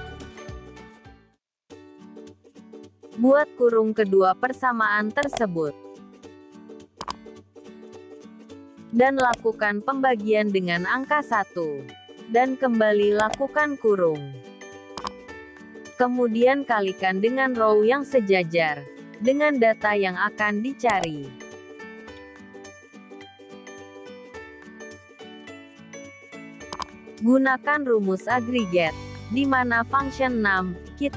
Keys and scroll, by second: 0.8 F4, 21.0 ctrl+shift+Down, 22.8 F4.